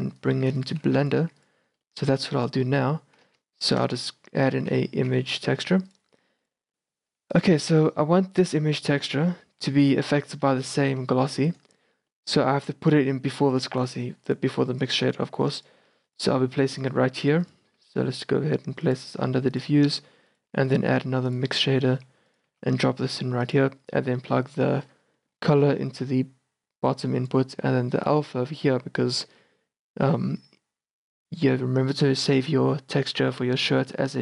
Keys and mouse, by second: 1.0 g, 1.3 a, 3.4 shift+a, 7.2 g, 7.8 a, 10.7-11.0 right drag, 11.0 g, 11.4-12.3 drag, 12.3 middle click, 13.1 g, 14.4-15.3 drag, 15.3 g, 16.4 g, 17.2 a, 17.8 g, 18.5-19.5 drag, 19.6-21.6 drag, 20.0-22.6 typing, 26.0-32.8 drag.